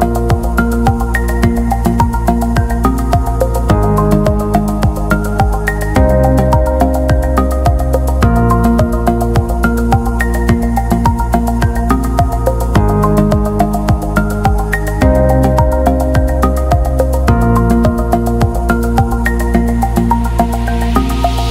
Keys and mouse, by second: 0.5 g, 1.9 b, 3.5 w, 5.0 w, 5.9 shift+middle click, 7.1 right click, 7.4 g, 9.4 shift+middle click, 10.7 g, 11.8 g, 13.3 shift+right click, 14.0 m, 15.2 g, 17.3 m.